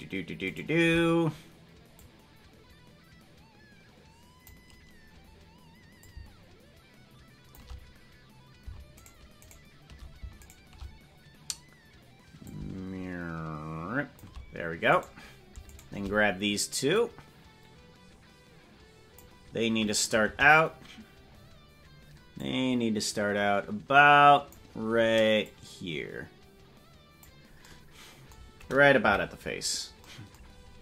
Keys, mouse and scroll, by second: 2.0-4.6 drag, 6.0-7.6 drag, 9.0 shift+click, 9.0 shift+right click, 10.5 shift+click, 12.4-14.2 drag, 15.0 right click, 15.8-19.3 shift+drag, 15.8 shift+right click, 19.6-20.2 scroll down 4, 19.7-20.2 scroll up 2, 20.2 KP_0, 21.3-22.4 scroll up 3, 22.4-24.6 drag, 25.4-27.2 drag, 29.0 KP_Decimal, 29.6 scroll up 1, 29.7 scroll down 4, 30.5-30.8 scroll up 1.